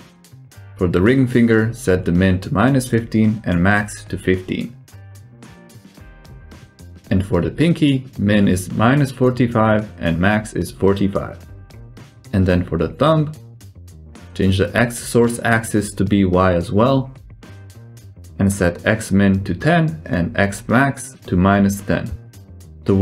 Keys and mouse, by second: 0.1 click, 0.6-1.9 drag, 3.2-5.9 drag, 6.6 click, 9.5-11.8 drag, 12.8-14.6 drag, 15.3 click, 16.8-17.8 drag, 19.7-22.8 drag.